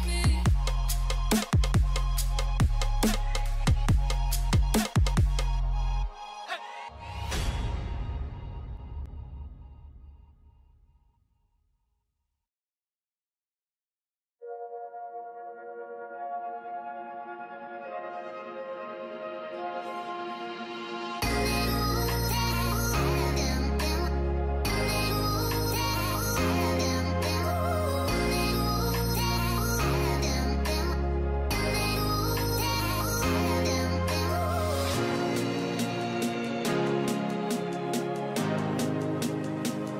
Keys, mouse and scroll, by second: 4.9-5.3 scroll up 1, 6.1 alt+scroll down 1, 6.9 alt+scroll up 1, 7.6-8.1 alt+scroll down 1, 8.2-8.8 scroll up 1, 8.8-9.2 typing, 11.1 double click, 11.5 typing, 12.9-13.6 typing, 13.1 double click, 17.1 double click, 20.7-22.2 scroll down 1, 22.2 double click, 26.9 double click, 28.4 double click, 30.2 alt+scroll down 1, 31.9-32.4 alt+scroll up 1, 32.9-33.5 alt+scroll up 1, 34.1-35.2 typing, 39.5 double click.